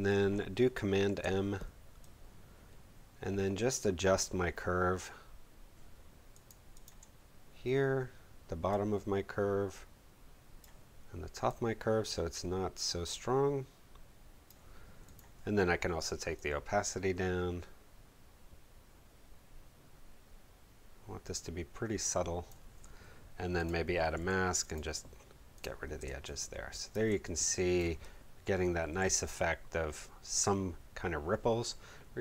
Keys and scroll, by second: 0.8 super+m, 24.2 b, 26.0 space, 28.9 v.